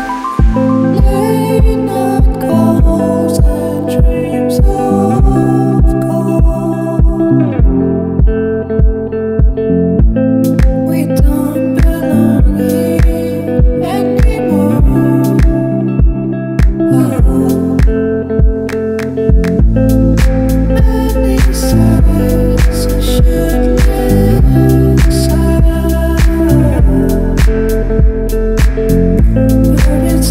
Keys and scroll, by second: 11.2 scroll down 1, 12.1 scroll down 1, 14.7 scroll down 1, 15.4 scroll down 1.